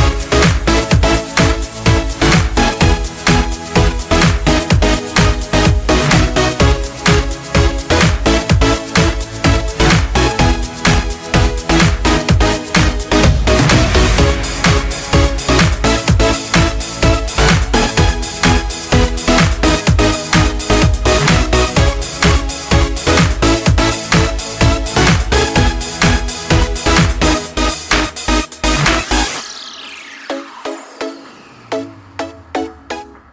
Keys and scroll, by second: 0.0-0.5 typing, 26.5 ctrl+Return, 31.3 ctrl+x, 32.3 ctrl+v.